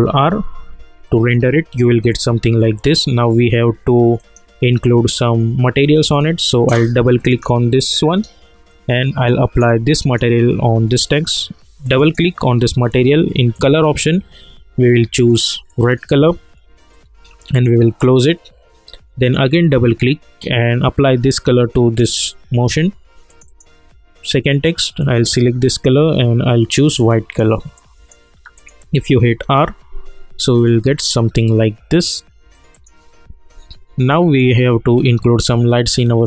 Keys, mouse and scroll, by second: 4.1 click, 7.1 click, 7.3-28.5 drag, 29.4 ctrl+r, 32.7 click, 33.7-36.2 alt+middle drag.